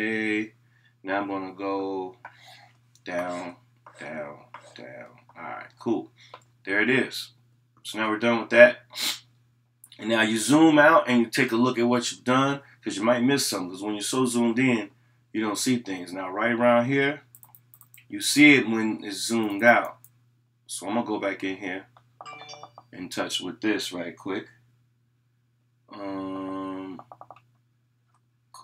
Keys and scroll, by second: 22.2 ].